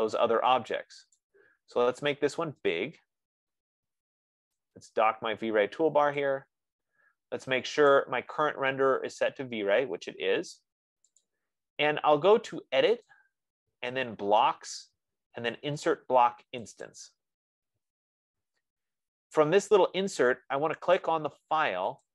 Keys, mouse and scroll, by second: 0.2-1.4 scroll down 3, 1.6 right click, 3.5 scroll down 3, 3.8 click, 6.5 click, 8.4 click, 13.5 click, 17.2 click.